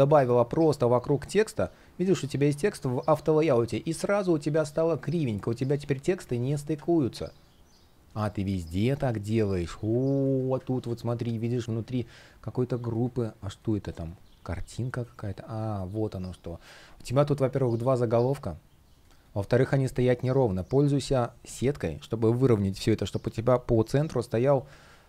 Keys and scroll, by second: 0.8 F1, 6.0 super+z, 7.8 space, 16.7 shift+p, 24.6 super+z.